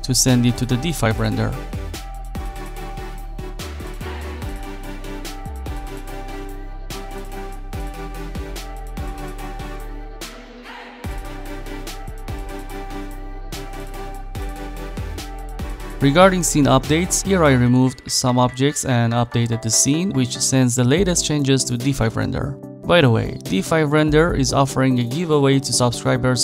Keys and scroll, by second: 18.0 Delete.